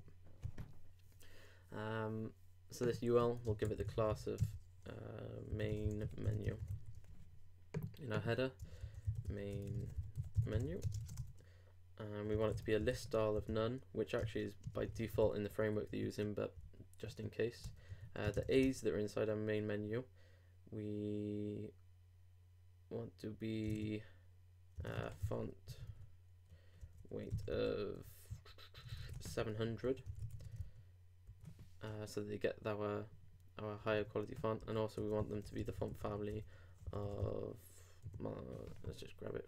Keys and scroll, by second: 4.4 shift+', 5.5 shift+m, 6.7 super+u, 10.9 shift+space, 11.0 shift+[, 11.1 shift+Return, 14.2 shift+e, 14.6 shift+space, 15.5 super+;, 15.6 super+s, 15.9 super+Tab, 16.6 super+r, 17.0 super+Tab, 17.6 super+Return, 18.3 shift+[, 18.6 shift+Return, 23.8 super+Tab, 24.9 super+f, 30.2 super+;, 30.4 super+Tab, 30.6 super+r, 33.9 super+Tab, 34.6 super+Up.